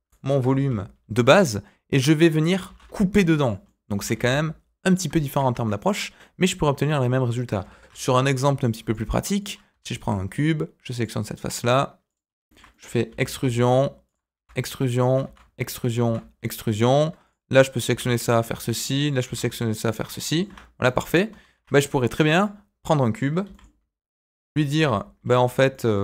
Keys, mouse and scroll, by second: 0.0 Delete, 0.4 shift+a, 2.6 s, 3.6 middle click, 3.9 s, 5.2 shift+middle click, 5.5 Tab, 5.6 middle click, 6.5 Tab, 7.5 Delete, 7.7 shift+a, 9.7 Tab, 9.9 middle click, 10.9 click, 11.2-12.0 scroll down 1, 12.0 click, 12.2 scroll down 1, 12.4 shift+middle click, 12.7 middle click, 13.0 e, 14.3 e, 15.2 e, 16.0 e, 17.2 click, 17.8 e, 18.6 middle click, 19.1 click, 19.2 e, 20.0 scroll down 1, 20.2 middle click, 20.4 Tab, 20.8 middle click, 21.4 shift+a, 23.4 g, 24.9 middle click, 25.7 middle click.